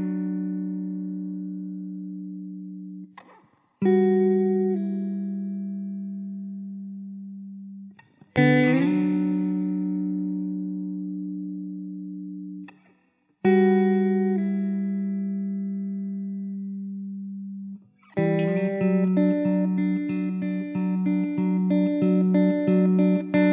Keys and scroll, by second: 7.1 ctrl+s.